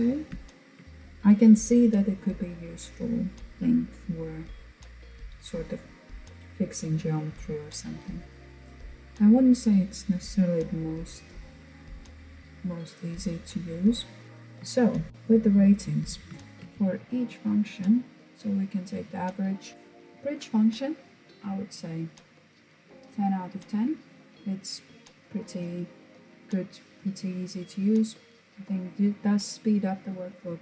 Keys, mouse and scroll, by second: 6.4-7.0 scroll down 1, 7.0-10.0 scroll down 1, 11.9-12.5 scroll down 2, 12.5-14.0 middle drag, 14.0 scroll up 1, 14.2-15.0 shift+middle drag, 15.0-15.5 scroll down 2, 15.5-16.5 shift+middle drag, 16.5 scroll down 2, 21.2 click.